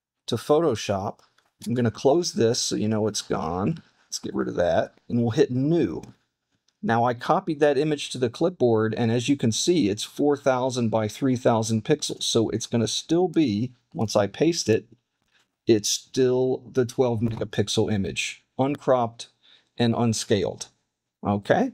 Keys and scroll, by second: 1.9 super+w, 4.8 super+w, 5.5 super+n, 14.7 super+v.